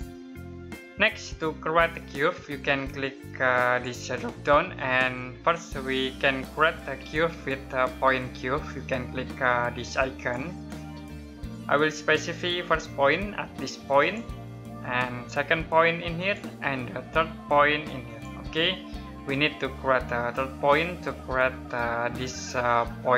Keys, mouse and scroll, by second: 3.4 click, 9.9 click, 13.7 click.